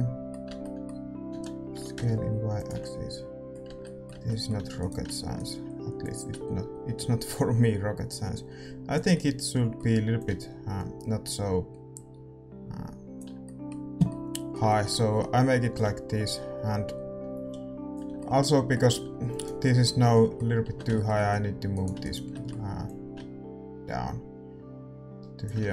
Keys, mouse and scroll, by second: 0.4 Tab, 1.3 s, 3.6 Tab, 4.6 a, 4.7-7.6 right drag, 6.0-8.3 drag, 9.1-11.7 middle drag, 10.2-13.4 drag, 13.4-16.7 middle drag, 15.7-17.9 drag, 18.1-22.8 middle drag, 19.0 Tab, 19.3-23.8 right drag, 22.8-24.4 drag, 25.6 Tab, 25.6 scroll down 1.